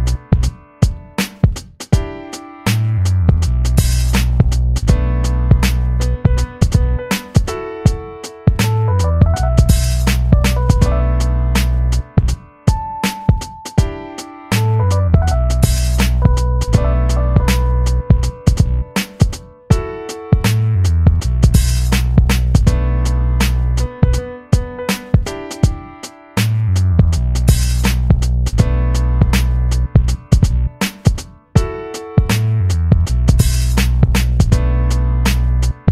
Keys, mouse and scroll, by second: 1.9-4.4 alt+drag, 4.4-8.9 shift+drag, 8.9 i, 9.8 click, 12.7 v, 13.9 i, 14.5 click, 15.3 v, 15.9-20.3 drag, 21.9-24.1 alt+drag, 24.1 ctrl+d, 27.5-30.4 drag, 33.1 click, 34.5 shift+Down.